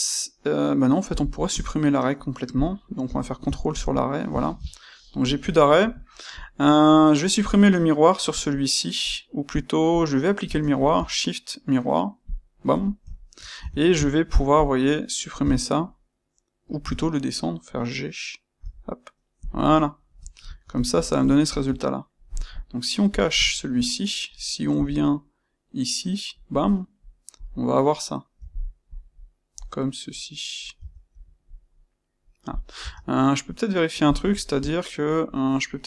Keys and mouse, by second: 2.5 click, 3.0 space, 4.8-7.3 shift+middle drag, 7.3 click, 10.3 space, 13.1-14.5 ctrl+middle drag, 13.5 Tab, 14.5 click, 15.3 x, 16.8 Escape, 18.5 g, 19.4 click, 19.5-21.5 middle drag, 21.5-23.1 shift+drag, 23.4-26.4 ctrl+middle drag, 24.7 g, 26.4 click, 26.6 middle click, 27.3 click, 28.3 g, 28.9 click, 29.1-32.4 middle drag, 30.7 Tab, 32.4 click, 32.7 Tab, 34.0 click, 34.3-35.8 shift+middle drag.